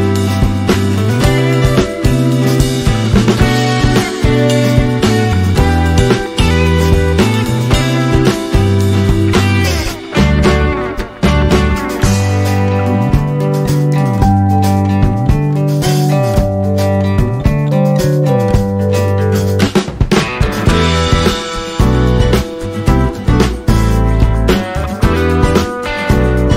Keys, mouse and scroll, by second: 4.6 ctrl+z, 4.7 alt+scroll up 1, 5.9 space, 6.1 click, 6.2 space, 6.9 scroll up 1, 7.7 alt+scroll down 1, 8.9 click, 12.7 click, 16.9 click, 18.6 alt+click, 19.1-20.5 alt+drag, 24.0 BackSpace, 24.8 click.